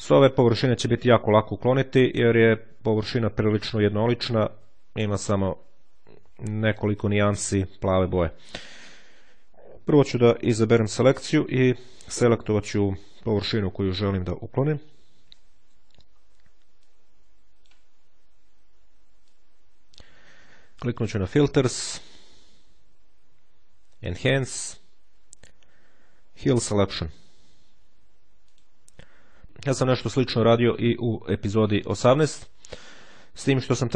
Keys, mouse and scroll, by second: 3.6-4.3 ctrl+scroll up 2, 4.7-5.4 ctrl+scroll down 2, 5.4-5.9 scroll down 1, 9.8 click, 11.7-15.1 drag, 15.9-16.4 ctrl+scroll up 2, 16.7-18.0 drag, 19.2-20.4 drag, 20.9 click, 28.3 click.